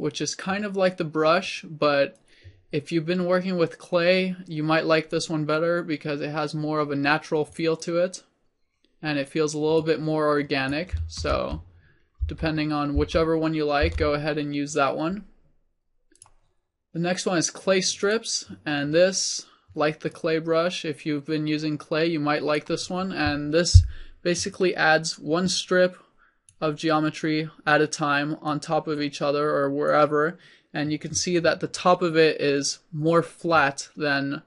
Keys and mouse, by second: 2.2-3.9 drag, 5.6-11.7 drag, 11.7 ctrl+z, 12.6 ctrl+z, 13.3 ctrl+z, 14.2 ctrl+z, 17.4 click, 20.1-30.2 drag.